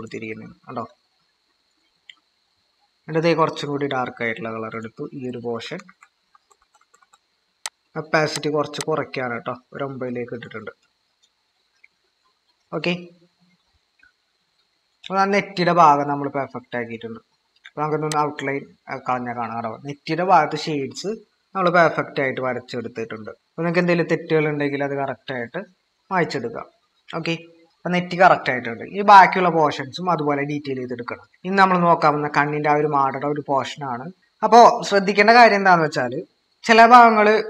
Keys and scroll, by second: 5.6-7.6 typing, 13.7-14.5 typing, 16.5 ctrl+-, 28.6 ctrl+-, 28.7 ctrl+=, 29.3 ctrl+=, 34.1 typing.